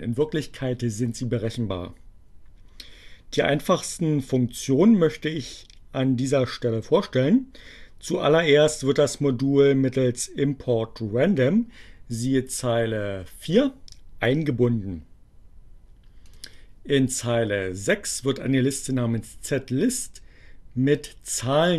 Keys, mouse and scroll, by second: 16.1 click.